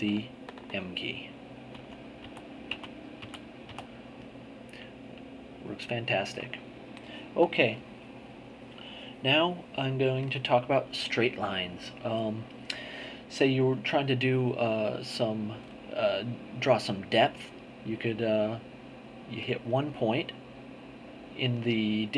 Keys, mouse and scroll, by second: 0.2-1.3 ctrl+drag, 1.7 m, 4.9-6.8 ctrl+drag, 19.4 click.